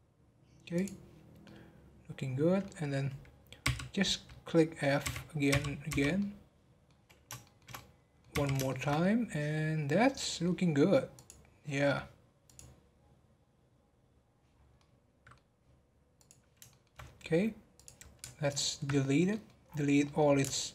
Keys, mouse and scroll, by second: 0.7 click, 1.4-3.6 middle drag, 3.6 f, 4.3 middle click, 5.0 f, 6.1-8.3 middle drag, 8.3 f, 8.6-11.1 shift+middle drag, 11.1 click, 11.8-12.4 middle drag, 12.4 click, 14.5 scroll down 4, 14.7-16.1 middle drag, 16.1 click, 16.7-17.7 shift+middle drag, 17.7 click, 18.9 scroll down 2, 19.3 middle click, 19.6-20.0 scroll up 5, 20.0 middle click.